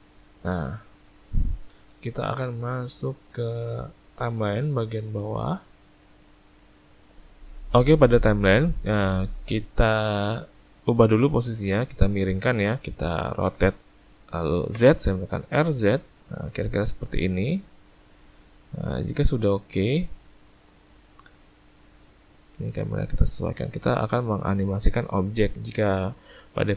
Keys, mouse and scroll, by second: 7.2 ctrl+shift+z, 11.5 click, 13.4 r, 22.7 shift+middle click.